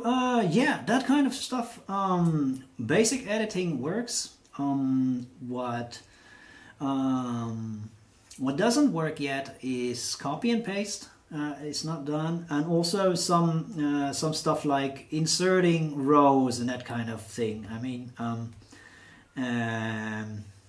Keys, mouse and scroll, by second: 17.5 click.